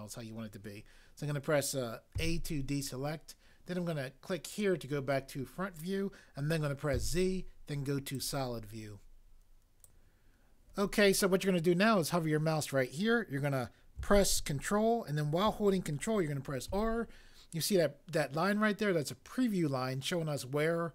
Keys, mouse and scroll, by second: 2.1 a, 7.0 z, 16.7 ctrl+r.